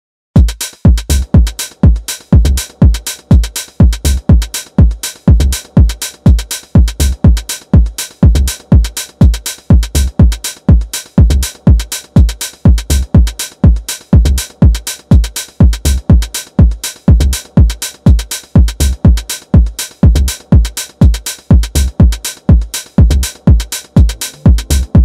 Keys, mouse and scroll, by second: 0.6-3.7 shift+middle drag, 5.3-6.2 middle drag, 6.2 Tab, 6.5-12.0 middle drag, 13.9 click, 14.3-17.2 middle drag, 17.2 click, 19.7 ctrl+shift+click, 20.4-23.1 middle drag.